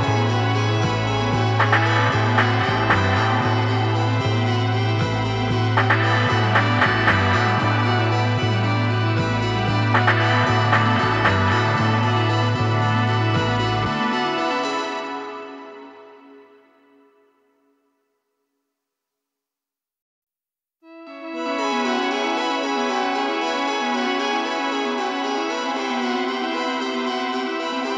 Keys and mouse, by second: 4.2-7.1 drag, 21.3 space, 22.5-24.4 drag, 23.5 space.